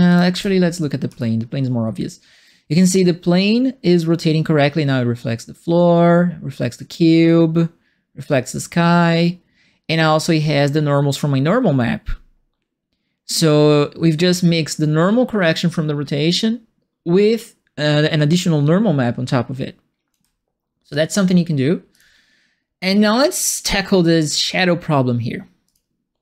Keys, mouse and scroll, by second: 0.0 click, 0.3 f, 1.1-2.4 alt+right drag, 2.7-20.1 alt+drag, 21.9 click, 25.6 click.